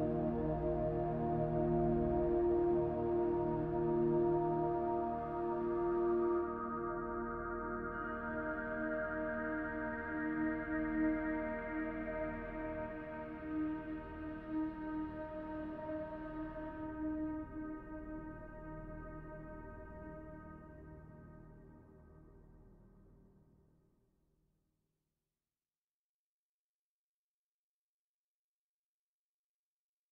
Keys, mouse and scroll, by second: 0.1 KP_0, 1.7 middle click, 3.3 middle click, 7.4 scroll down 2, 7.9-10.4 scroll up 1, 10.4 scroll down 1, 10.8 middle click, 12.8 scroll down 1, 13.3 middle click, 19.0 click, 22.8 click, 24.5-25.5 scroll up 4, 25.5-25.8 scroll down 2, 25.8 middle click, 29.1 click.